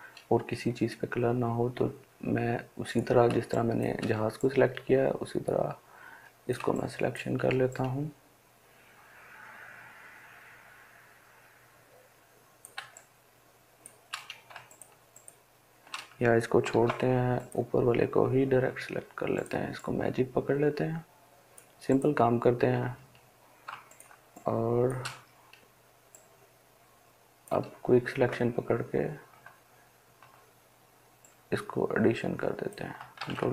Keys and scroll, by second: 16.1 ctrl+d, 32.7 ctrl+alt+z.